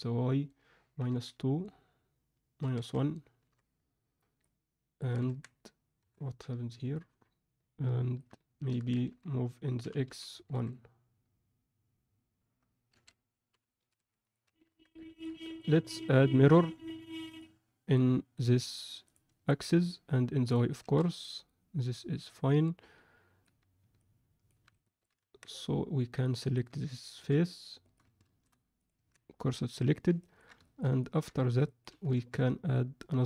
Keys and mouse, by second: 4.4 alt+middle click, 5.2 Tab, 6.0 KP_1, 6.9-8.1 alt+middle drag, 8.6 Tab, 9.8 z, 9.8 g, 13.4 g, 14.4 z, 14.6 Tab, 15.0 ctrl+middle click, 15.4 middle click, 16.1-17.4 drag, 18.3 click, 19.4 alt+middle click, 20.4 click, 20.8 alt+a, 21.1-23.4 alt+middle drag, 23.9-24.4 alt+middle drag, 24.8 middle click, 25.1 Tab, 26.2 middle click, 27.2 3, 27.8 click, 28.2 shift+s, 28.9 Tab, 30.2 ctrl+middle click, 30.6 alt+shift+middle click, 31.0 ctrl+middle click, 31.7 alt+middle drag, 32.1 shift+a.